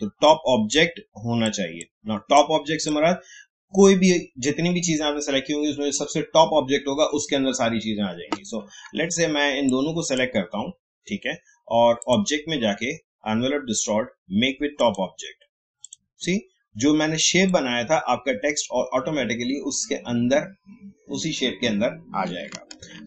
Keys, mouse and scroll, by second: 0.7-5.3 drag, 9.7-12.0 drag, 14.7 click, 22.4 click, 22.8 ctrl+z.